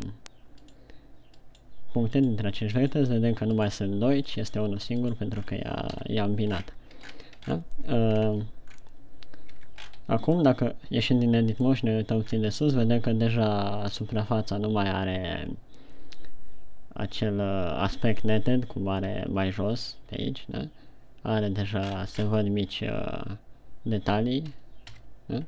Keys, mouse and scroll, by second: 2.1 right click, 3.2 right click, 4.9 right click, 5.8-6.1 scroll down 5, 6.5 KP_1, 7.1 scroll down 1, 7.7-8.1 shift+scroll down 4, 8.6 ctrl+scroll up 2, 9.2 scroll down 1, 9.9 Tab, 10.3 scroll up 3, 11.0 middle click, 13.0 scroll down 2, 22.3-24.2 scroll up 8, 25.3 KP_1.